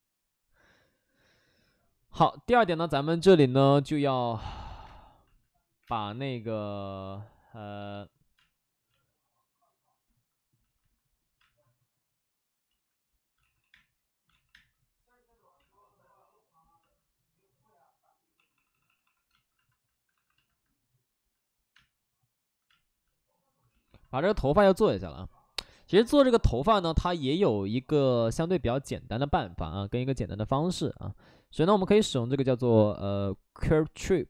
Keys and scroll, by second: 4.8 space, 5.7 3, 5.8 space, 7.8 ctrl+z, 8.3 space, 8.8 space, 11.5 space, 12.7 ctrl+z, 13.3-14.5 typing, 15.5 ctrl+z, 18.3-19.0 typing, 19.9 alt+s, 20.1 alt+s, 21.7 space, 22.6 space, 25.8 space.